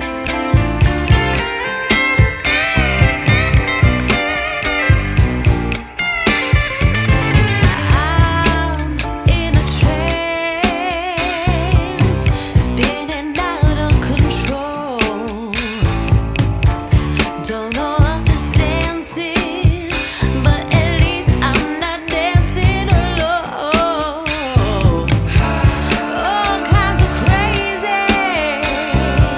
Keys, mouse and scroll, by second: 1.1 click, 2.2 click, 4.8 click, 7.5 click, 7.6 F10, 9.3 scroll down 1, 9.3-9.8 scroll up 1, 9.8 scroll down 1, 9.9-10.5 scroll down 1, 10.5 click, 11.4 shift+a, 11.6-12.5 scroll down 1, 21.2 click, 24.4 click, 25.8 F10, 27.9 click.